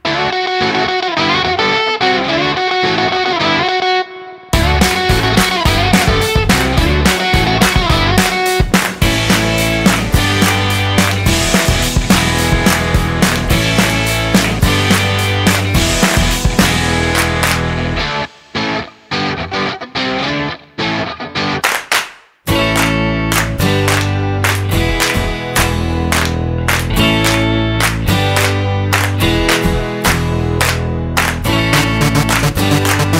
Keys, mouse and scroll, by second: 3.8 ctrl+alt+KP_0, 7.5 click, 8.4 click, 11.7 click, 15.8 shift+`, 30.1 click, 32.1-33.1 scroll up 2.